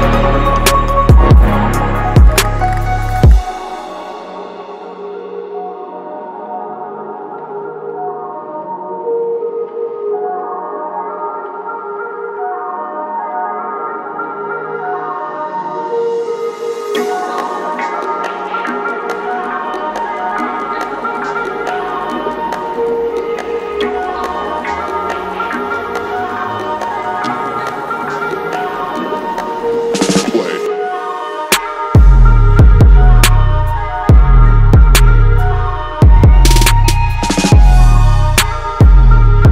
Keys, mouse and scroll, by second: 0.0 alt+click, 0.6 click, 1.5 click, 1.8 click, 2.1-3.3 drag, 2.9 KP_0, 3.5-6.3 drag, 6.6 ctrl+s, 7.9-10.3 drag, 10.5 click, 10.8 ctrl+s, 12.9-14.9 drag, 15.6-17.5 drag, 17.7 click, 18.4 ctrl+s, 21.4-24.6 drag, 25.0 click, 25.5 click, 26.4 click, 26.9 click, 28.2-31.6 drag, 32.1-35.5 drag, 37.2 ctrl+s, 38.4-39.5 drag.